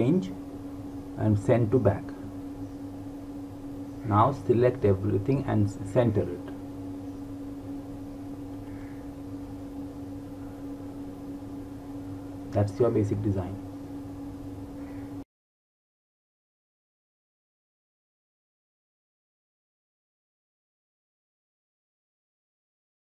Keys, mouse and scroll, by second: 1.1 click, 3.7 click, 14.3 click.